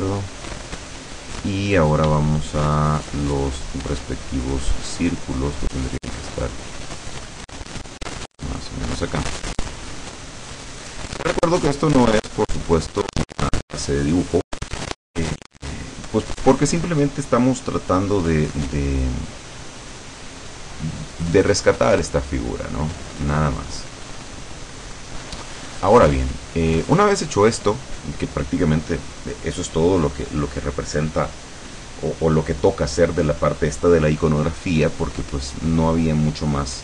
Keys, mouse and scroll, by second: 2.3-4.1 shift+middle drag, 6.5-7.7 drag, 7.9 click, 9.8-11.1 drag, 11.4 click, 12.3-13.3 drag, 23.9-28.7 drag.